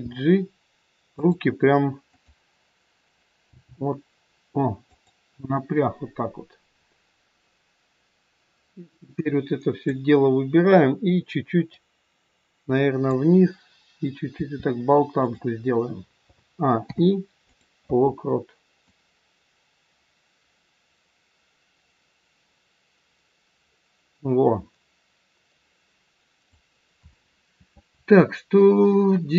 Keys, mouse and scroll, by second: 2.2 click, 3.4 g, 9.2 click, 11.8 click, 14.3 r, 16.1 a, 16.8 i, 18.9 click.